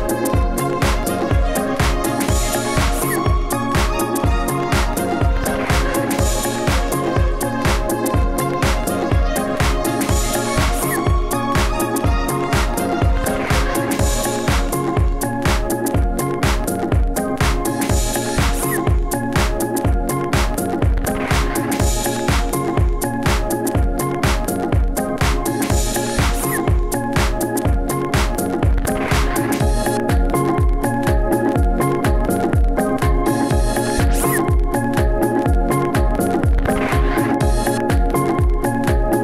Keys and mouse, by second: 0.3 g, 1.2 g, 2.3 KP_1, 3.9 click, 4.6 e, 5.3 shift+right click, 5.5 f, 5.9 e, 6.6 shift+right click, 6.7 f, 7.0 ctrl+s, 11.9 Tab, 12.2 x, 13.0 shift+a, 14.3 Tab, 14.5 s, 15.4 w, 16.5-18.5 typing, 17.7-19.0 drag, 20.1 KP_3, 20.4 KP_1, 21.1 s, 21.9 s, 22.4 Tab, 22.9 a, 23.3 middle click, 24.2 Tab, 24.5 s, 25.6 Tab, 26.7 KP_1, 26.8 KP_3, 27.0 KP_1, 27.7 Tab, 28.0-33.6 typing, 32.4-34.1 drag, 34.1 Tab, 34.4 alt+z, 35.9 alt+z, 38.8-39.2 drag.